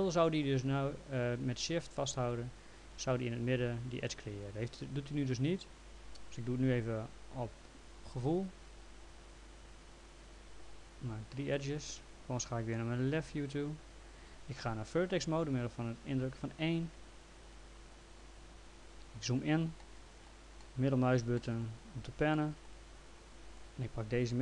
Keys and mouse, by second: 2.3 shift+click, 4.5 ctrl+z, 8.4 click, 10.0 click, 11.4 click, 13.2 l, 17.5 right click, 17.9 click, 19.8 middle click, 23.3 click.